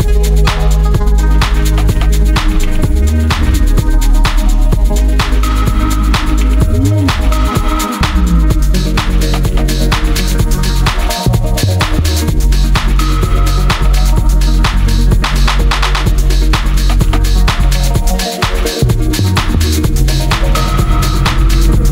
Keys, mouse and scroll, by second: 4.1 click, 12.9 click.